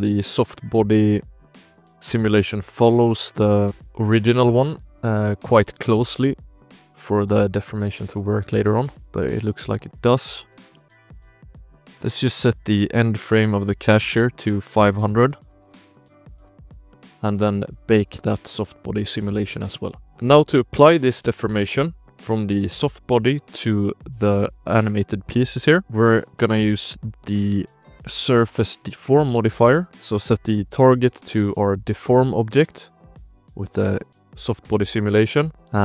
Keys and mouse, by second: 1.1 click, 1.7 KP_Decimal, 2.7 alt+a, 3.1 shift+click, 3.4 ctrl+s, 3.6 space, 4.1 space, 4.3 shift+drag, 4.7 space, 5.0 space, 5.4 drag, 5.8 click, 6.0 shift+drag, 6.2 space, 6.8 space, 7.0 shift+drag, 7.5 space, 7.9-8.6 shift+drag, 8.6-11.7 typing, 8.9-9.2 shift+drag, 9.9 shift+drag, 11.1 shift+click, 11.9 ctrl+s, 12.4 shift+click, 13.8 ctrl+click, 15.0 ctrl+click, 16.4 click, 16.7 shift+click, 17.1 ctrl+s, 17.6-20.1 drag, 20.1 KP_Decimal, 20.5 alt+a, 20.8 click, 21.0 ctrl+s, 21.3 shift+drag, 21.6 click, 22.1 drag, 24.7 drag, 24.7 h, 25.1 click, 25.6 shift+click, 26.7-28.4 drag, 29.2 ctrl+s, 29.5 shift+drag, 29.8-32.3 drag, 35.4 ctrl+s, 35.5 shift+click.